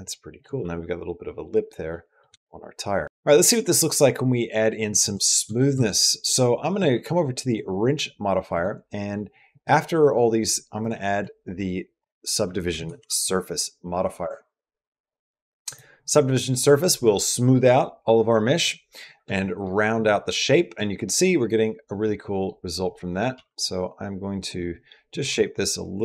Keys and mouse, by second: 1.7 middle click, 2.2 shift+middle click, 3.7 middle click, 4.9 Tab, 5.5 Tab, 7.3 click, 8.4 click, 9.3 click, 10.7-14.3 drag, 14.3 typing, 21.9 middle click, 22.8 middle click, 23.1 g, 25.1 g.